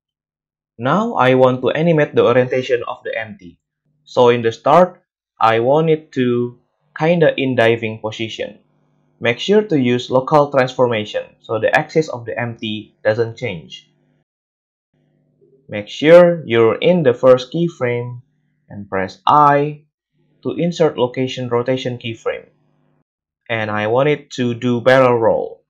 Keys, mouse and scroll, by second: 3.3 click, 3.4-5.2 middle drag, 5.2-19.7 drag, 22.2-25.6 drag, 25.3 a, 25.5 a.